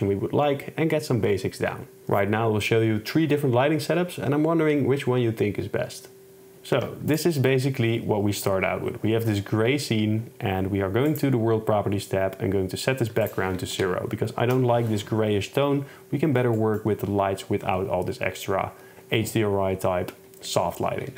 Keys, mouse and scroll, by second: 6.8 x, 11.2 click, 13.5-14.5 drag, 16.7 click, 16.7 right click.